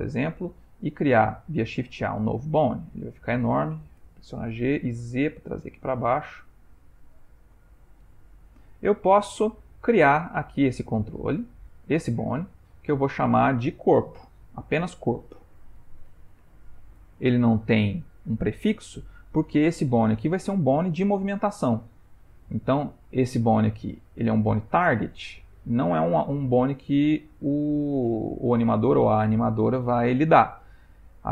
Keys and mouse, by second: 1.6 shift+a, 2.2 ctrl+middle click, 2.5 ctrl+middle click, 2.9 ctrl+middle click, 3.0 ctrl+middle click, 4.0 g, 6.9 ctrl+middle click, 8.3 shift+middle click, 12.5 click, 13.2 Tab, 14.4 F2, 23.0 click.